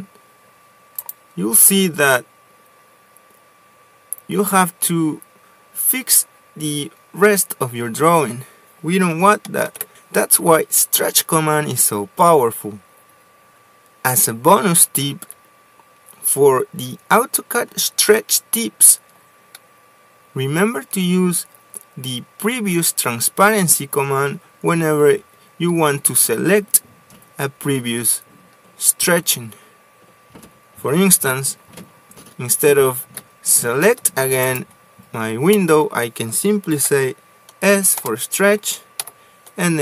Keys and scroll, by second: 1.3 Escape, 3.8 m, 4.0 space, 15.0 ctrl+z, 33.5 s, 34.3 space, 36.0 Escape, 36.3 Escape, 37.3 s, 38.5 Return, 39.5 p.